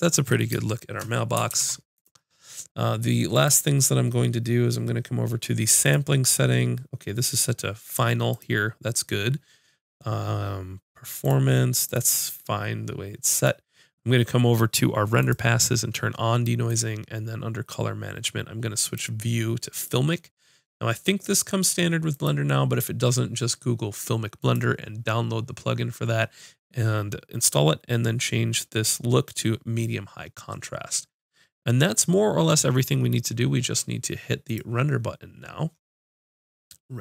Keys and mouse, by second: 1.5 ctrl+s, 3.3-32.8 drag, 34.5-37.0 drag.